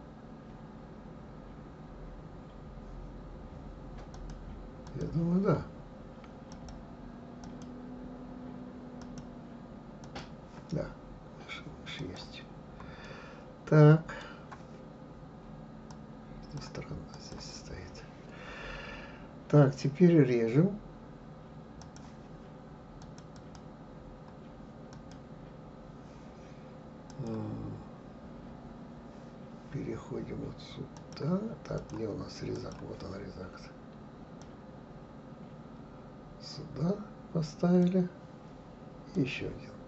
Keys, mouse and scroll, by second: 4.1 click, 4.8 click, 6.5-11.1 drag, 11.1-11.5 scroll up 1, 12.0 click, 13.0-15.9 middle drag, 15.9 click, 17.1-20.1 drag, 21.8-23.2 drag, 23.3 click, 24.9 click, 27.1 click, 30.9 click, 31.8 click, 32.5 click, 34.4-37.4 drag, 39.1-39.8 drag.